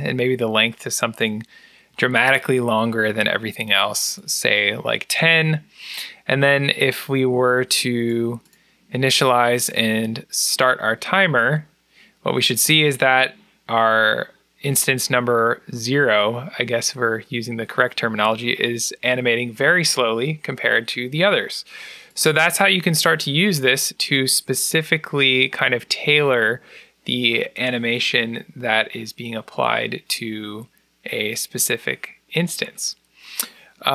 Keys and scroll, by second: 1.8 1, 2.3 0, 7.9-8.7 typing.